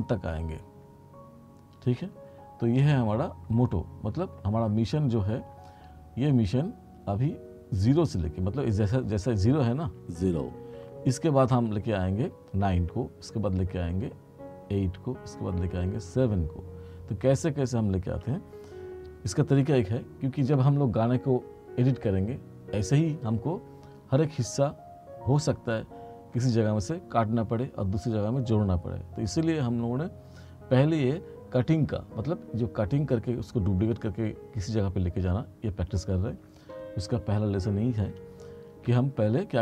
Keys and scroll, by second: 10.0 space, 38.9 t.